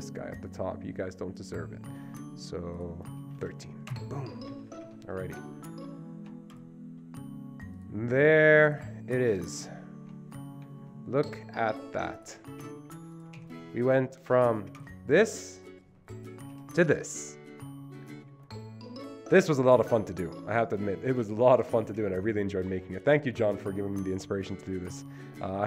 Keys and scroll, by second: 3.5 Return, 3.5 typing, 4.0 Return, 4.6 Escape, 4.8 Escape, 5.0 Escape, 12.7 Delete, 13.5 Delete, 16.7 Down.